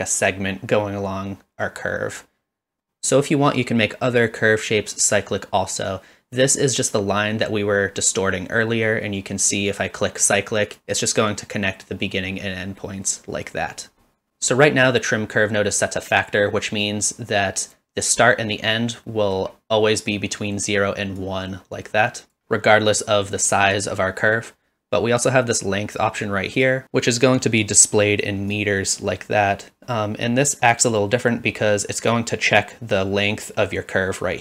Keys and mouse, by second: 10.7 click, 16.2-17.7 drag, 19.1 middle drag, 21.3-22.3 drag, 26.6 click, 28.5-32.2 drag.